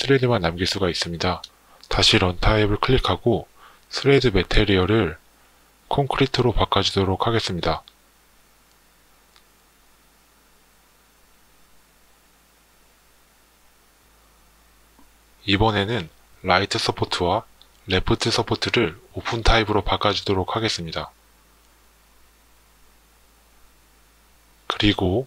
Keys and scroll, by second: 4.8 c, 5.6 o, 6.0 n.